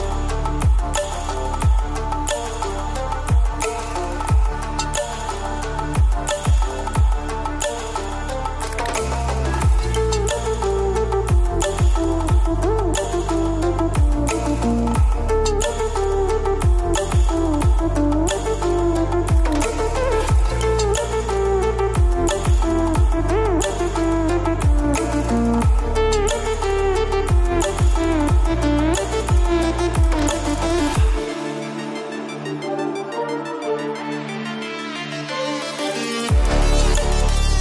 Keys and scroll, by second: 0.0 ctrl+0, 2.5 F7, 3.3 F7, 8.2 ctrl+a, 21.2 ctrl+0.